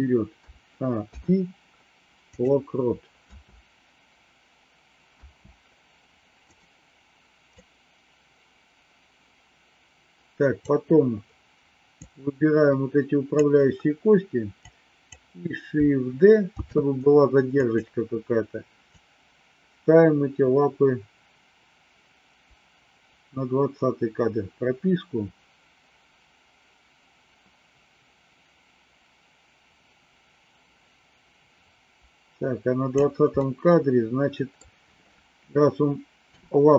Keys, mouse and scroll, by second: 0.3 a, 0.9 i, 3.3 space, 6.5 click, 6.5 space, 7.5-10.7 drag, 12.0-13.3 drag, 14.6 click, 16.6 shift+d, 19.0-33.0 drag, 33.5-34.6 middle drag, 36.2 KP_7.